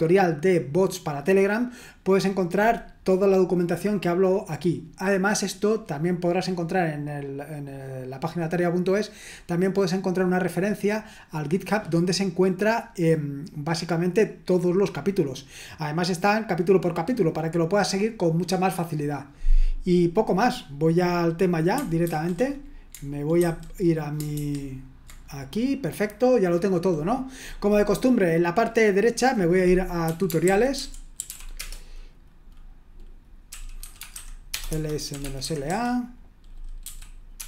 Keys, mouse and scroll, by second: 22.0 ctrl+1, 23.4 super+2, 24.4 super+1, 29.0 click, 29.9-31.8 typing, 33.3-37.4 typing.